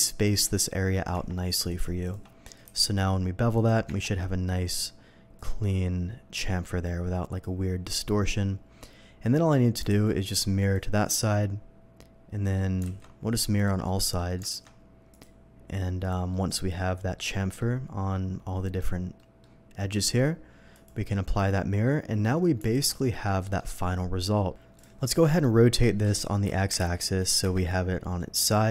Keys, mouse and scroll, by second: 1.1 Tab, 1.6 click, 2.0 alt+click, 2.6 ctrl+b, 3.5 ctrl+click, 3.8 Tab, 5.3-7.4 drag, 7.7 scroll down 1, 8.1 middle click, 8.6 scroll down 1, 8.8-9.5 middle drag, 9.8 alt+x, 10.6 alt+x, 10.6 click, 11.2-12.5 middle drag, 13.5 click, 13.8 middle drag, 14.5 alt+x, 15.1 click, 16.0 click, 16.3-17.1 middle drag, 17.6-18.7 middle drag, 19.1 middle drag, 20.7 click, 21.3 click, 21.8-22.2 middle drag, 22.7 alt+a, 22.9 middle drag, 23.4 middle click, 24.7 click, 25.2 middle click, 26.0 r, 26.8 9, 26.8 0, 27.4 Return, 28.3-28.7 middle drag.